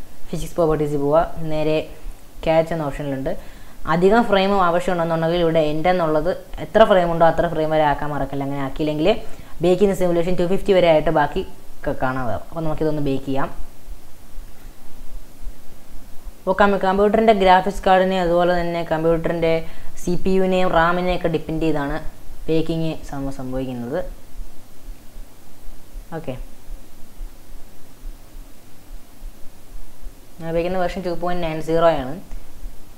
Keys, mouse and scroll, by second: 0.5 click, 1.4 scroll down 2, 2.1 scroll up 2, 3.3-6.4 drag, 12.4-14.1 scroll down 3, 14.5-32.9 drag.